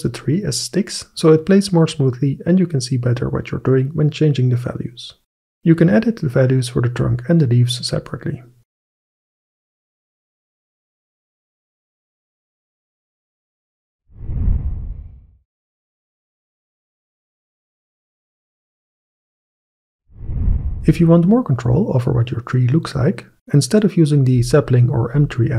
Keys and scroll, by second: 4.0 3, 4.4 Return, 6.6 1, 6.9 ., 7.2 5, 7.5 Return, 9.5 Return, 9.5 2.